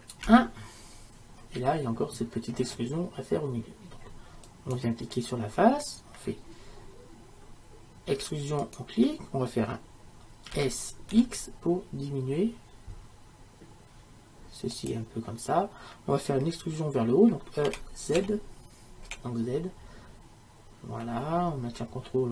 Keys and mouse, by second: 0.3 KP_1, 4.5-8.2 right drag, 8.2 e, 17.7 e.